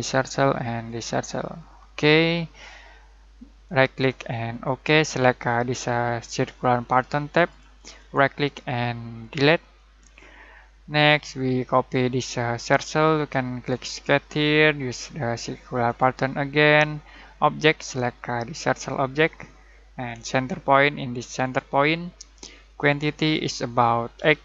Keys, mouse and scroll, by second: 3.6 right click, 4.5 click, 7.3 click, 7.9 right click, 9.2 click, 13.8 click, 18.6-23.4 drag, 24.1 8.